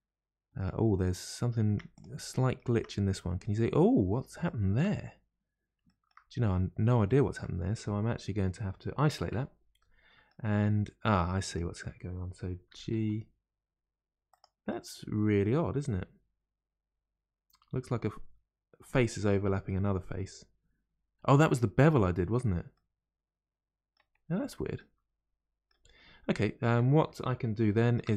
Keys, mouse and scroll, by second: 0.9-1.7 scroll up 2, 1.7 Tab, 1.9 click, 2.3 middle click, 2.7 Tab, 3.1-5.2 middle drag, 5.2-5.8 scroll up 1, 5.8 shift+middle click, 6.3-7.0 scroll up 1, 7.0-9.3 shift+middle drag, 9.3 KP_Divide, 9.8 middle click, 10.6-11.4 scroll up 2, 11.4 click, 12.7 g, 12.7 g, 14.6-17.7 middle drag, 19.6-20.0 scroll down 2, 20.0-22.3 middle drag, 22.3-22.7 scroll down 1, 22.7-24.2 middle drag, 24.2-24.8 scroll down 2, 24.8-25.9 middle drag, 25.9-26.3 scroll up 1, 26.3-28.1 middle drag.